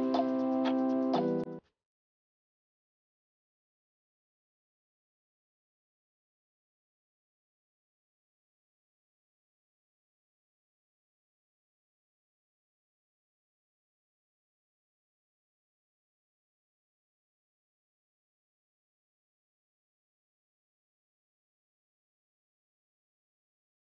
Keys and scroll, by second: 6.6 ctrl+z, 21.4 alt+BackSpace, 22.8 ctrl+d.